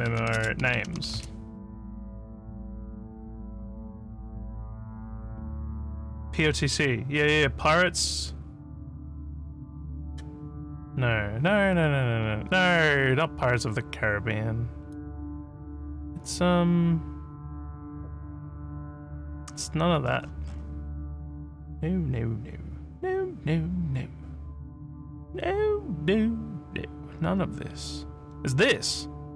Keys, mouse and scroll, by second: 0.0-1.6 typing, 4.2 scroll up 1, 10.0 click, 14.9 click, 16.0 scroll up 1, 17.8 scroll down 1, 18.6 scroll down 1, 20.0 scroll up 1, 20.1-20.7 scroll, 21.4 click, 27.2 scroll down 2, 28.3 scroll down 1.